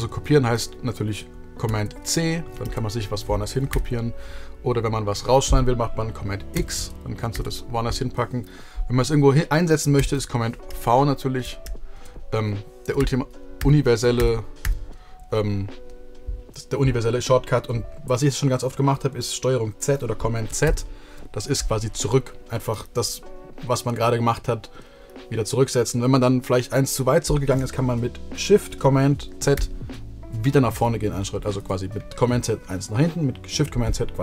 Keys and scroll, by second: 1.2 super+c, 2.2 super+v, 3.3 super+z, 6.2 super+x, 6.9 super+v, 9.6 super+z, 10.3 super+v, 12.6 super+z, 13.8 super+z, 14.2 super+z, 20.2 super+z, 29.1 shift+super+z, 30.9 super+z.